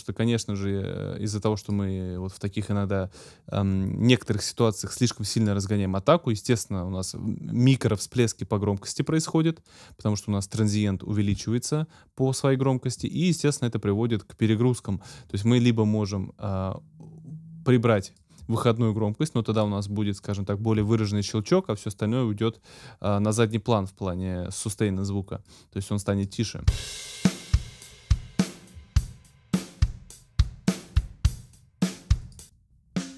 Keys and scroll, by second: 26.6 space.